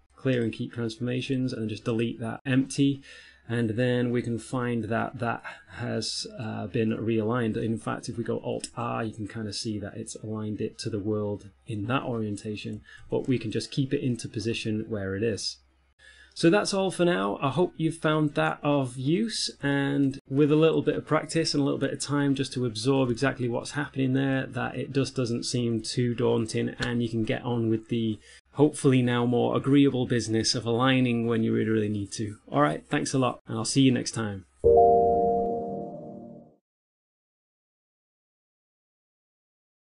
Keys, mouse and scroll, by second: 1.6 right click, 2.0 x, 2.5 right click, 4.1 middle click, 8.8 alt+r, 9.4 middle click, 13.7 ctrl+z, 14.4 middle click, 16.6 middle click, 17.6 ctrl+middle click, 20.1 shift+middle click, 20.8 middle click, 21.7 n, 22.0 t, 22.4 ctrl+middle click, 23.6 shift+middle click, 24.2 middle click, 27.1 middle click.